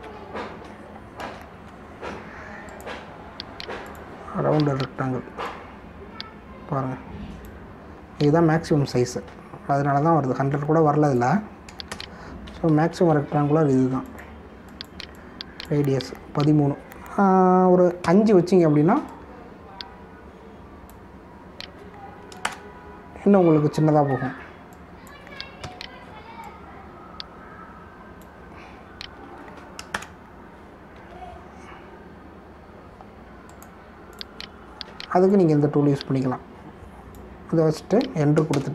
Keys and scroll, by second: 1.0 ctrl+d, 2.3 ctrl+=, 10.8 ctrl+s, 12.9 ctrl+Return, 13.9 ctrl+d, 19.0 5, 23.4 ctrl+Return, 24.7 ctrl+d, 26.6 1, 30.1 ctrl+d, 30.8 ctrl+Return, 31.9 ctrl+d.